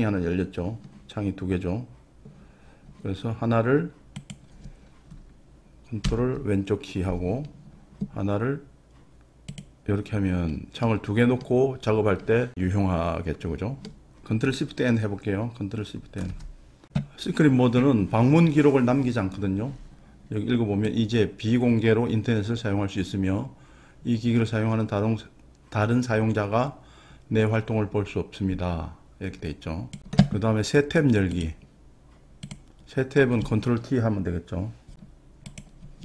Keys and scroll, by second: 6.1 super+Left, 16.3 ctrl+shift+n.